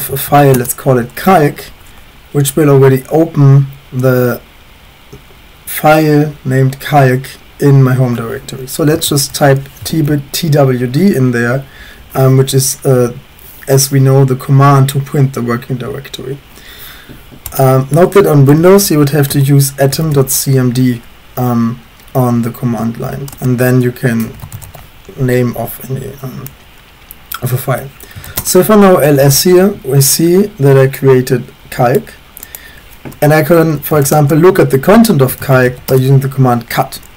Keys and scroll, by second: 0.0-0.7 typing, 8.7-9.8 typing, 9.9 ctrl+s, 18.2-20.6 typing, 23.4-25.1 typing, 26.6-28.7 typing, 33.5-36.1 typing.